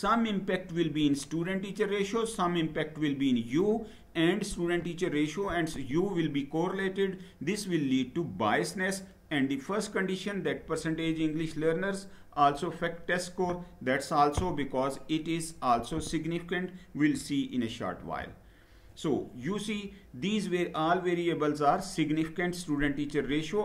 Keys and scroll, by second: 17.7 Down.